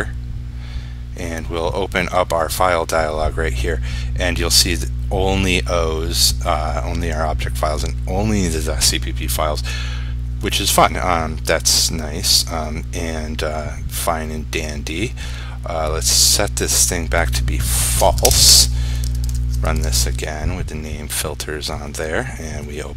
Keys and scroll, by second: 19.1 ctrl+s, 19.8 ctrl+r.